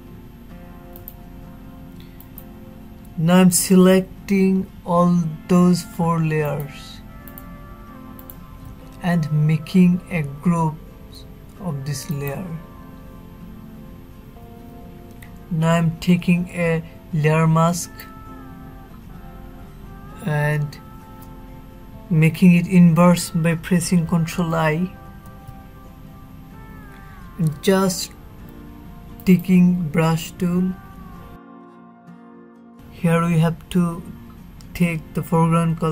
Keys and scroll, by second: 22.6 ctrl+i.